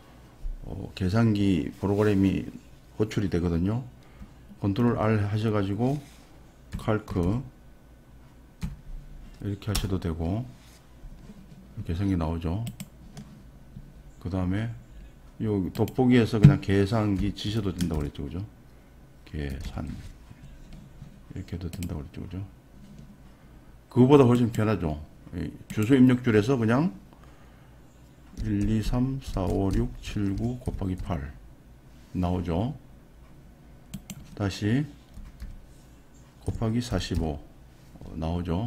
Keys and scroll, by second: 5.0 r, 6.8-8.6 typing, 9.7 Return, 17.4 r, 19.5 t.